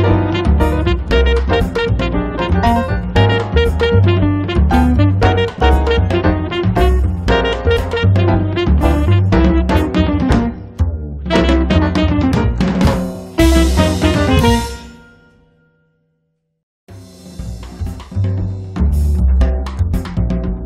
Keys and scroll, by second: 0.3 space, 1.0 Escape, 8.0 l.